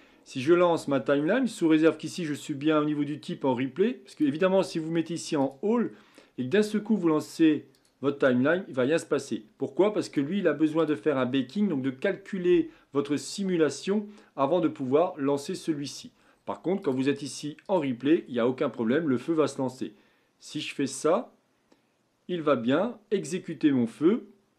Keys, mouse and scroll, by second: 1.2-1.8 scroll down 11, 4.1-7.2 drag, 7.7-13.9 drag, 16.9-19.8 drag, 20.6 click.